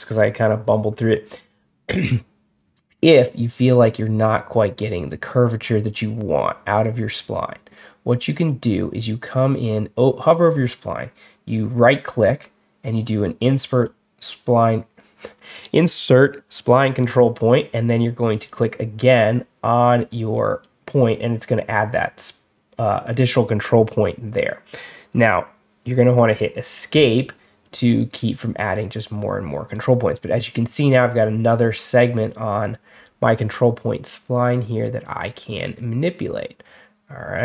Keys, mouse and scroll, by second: 2.7-4.9 drag, 5.6-8.3 drag, 10.0 right click, 13.6 click, 18.2 click, 19.9 click, 26.0 Escape, 27.5-29.6 drag, 30.5-32.6 drag, 33.7-34.9 drag, 35.6 click.